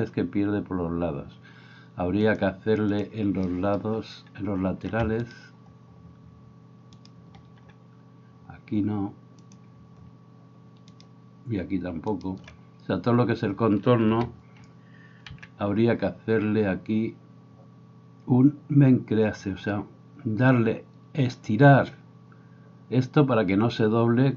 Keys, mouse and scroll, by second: 5.3 alt+right click, 10.9 shift+right click, 12.1 shift+right click, 15.3 n.